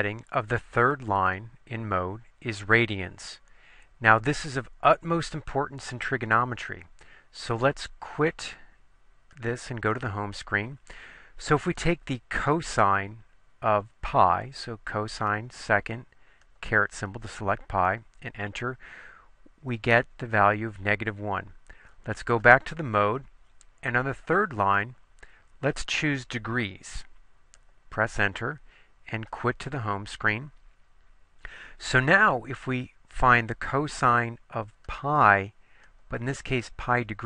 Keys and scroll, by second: 16.5 ^, 17.9 Return, 24.3 Down, 24.9 Down, 26.1 Right, 27.7 Return, 36.0 ^.